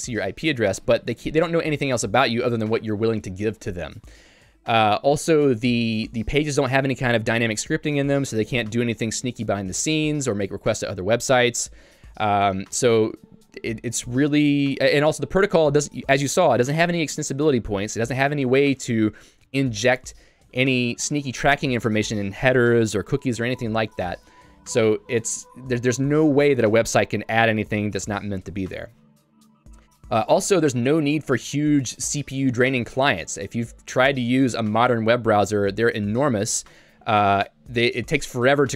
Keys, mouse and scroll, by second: 30.3 j.